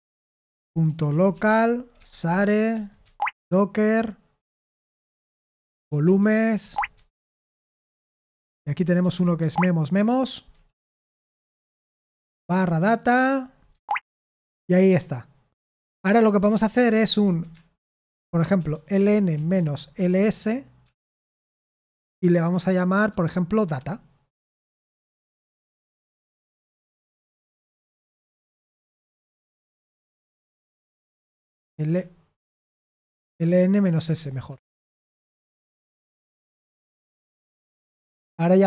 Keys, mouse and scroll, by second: 2.2-3.5 typing, 6.7-7.4 typing, 15.7 BackSpace, 17.2 ctrl+a, 18.0 alt+f, 18.6-20.4 typing, 27.9 ctrl+e, 28.2-29.7 typing, 31.7 ctrl+a, 32.3 alt+f, 32.8 alt+f, 34.4 Return.